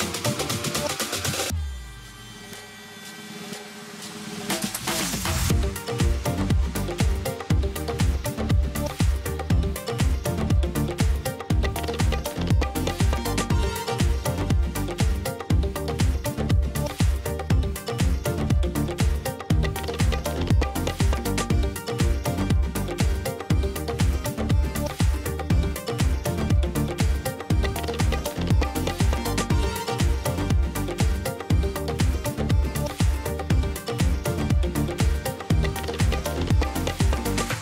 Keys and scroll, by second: 7.5 2, 12.3 ctrl+j, 12.7 v, 15.5 space, 17.6 space, 19.6 space, 37.1 space.